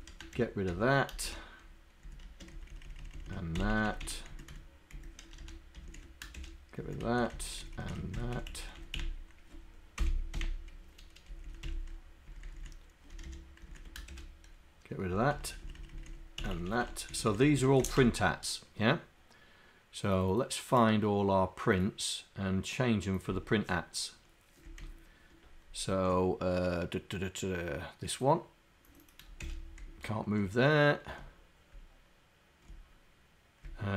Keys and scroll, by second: 29.3 /.